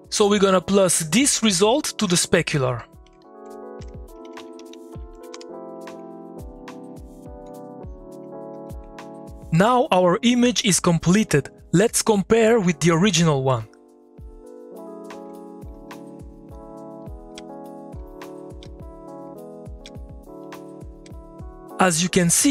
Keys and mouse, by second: 2.5 click, 3.8 Tab, 4.0-5.0 typing, 5.1 Down, 5.3 Return, 6.4-8.5 drag, 8.5 2, 14.4 middle click, 14.9 click, 15.7 2, 15.9 click, 16.1 middle click, 16.5 click, 17.3-21.0 typing.